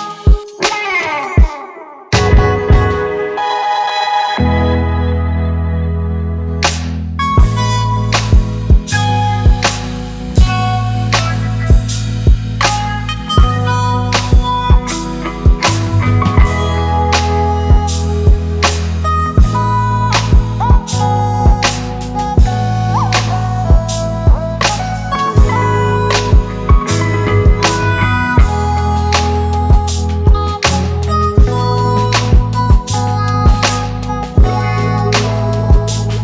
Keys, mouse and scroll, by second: 7.2-10.1 scroll up 1, 11.3 typing, 30.3-31.0 typing, 33.4 double click.